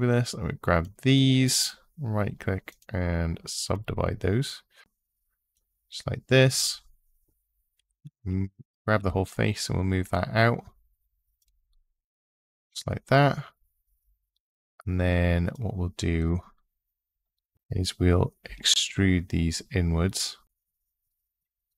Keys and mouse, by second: 0.0 click, 1.5-2.6 drag, 4.8 ctrl+z, 4.8 3, 7.6 g, 8.0 z, 8.8 x, 11.2 click, 15.3 click, 18.2 e.